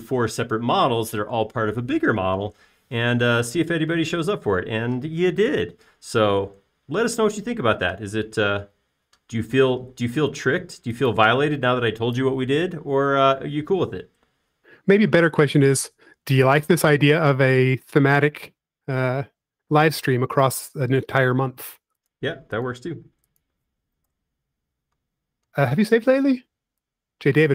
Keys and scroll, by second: 11.4 r, 16.7 l, 19.1-20.1 typing, 21.6-22.4 typing, 24.2 space, 25.4 BackSpace.